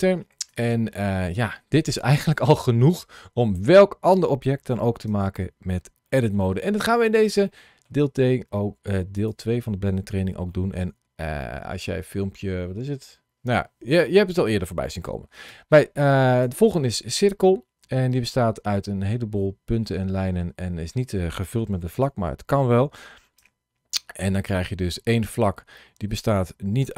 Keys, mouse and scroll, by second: 1.2-2.7 scroll down 1, 2.7 Tab, 5.0 Tab, 5.9 shift+middle click, 6.7 middle click, 7.3 middle click, 9.0 click, 9.9-10.2 scroll up 1, 10.4 shift+middle click, 11.3 middle click, 15.4 Tab, 16.3 Tab, 23.9 scroll up 2, 24.4 middle click, 25.2 Tab.